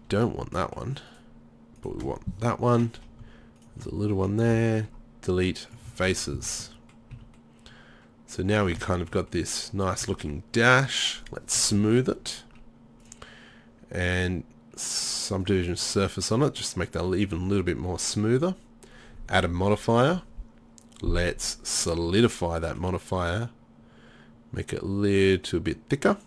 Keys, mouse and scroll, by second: 1.1 middle click, 1.9-5.8 drag, 4.5 Delete, 6.4 Tab, 7.2 z, 7.7 middle click, 22.3 middle click, 24.6-26.2 middle drag.